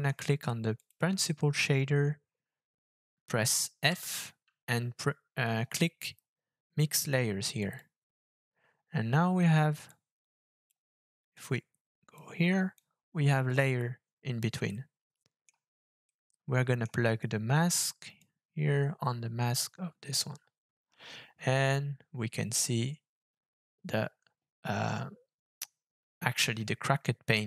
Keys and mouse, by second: 0.8 click, 9.9-10.7 drag, 11.4 click, 12.8 click, 14.6 middle click, 16.1 middle click, 18.2-19.6 drag.